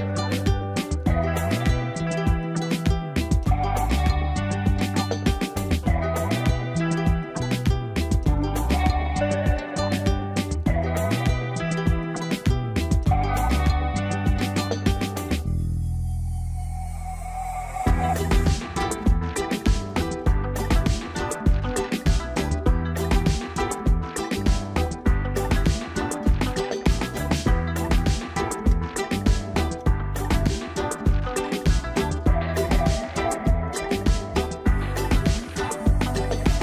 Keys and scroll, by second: 31.8 ctrl+z.